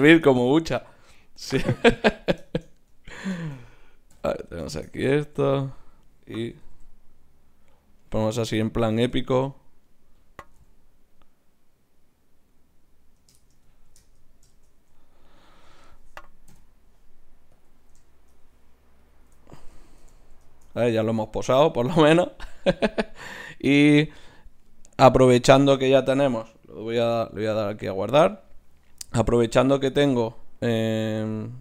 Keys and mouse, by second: 0.8 g, 1.8-4.0 drag, 4.1 KP_0, 6.5 r, 8.8-10.5 drag, 9.9 right click, 10.5 g, 14.8 a, 16.5 n, 17.5-23.3 drag, 23.3-25.6 right drag, 24.9-27.0 drag, 27.0 ctrl+s, 30.6-31.6 drag.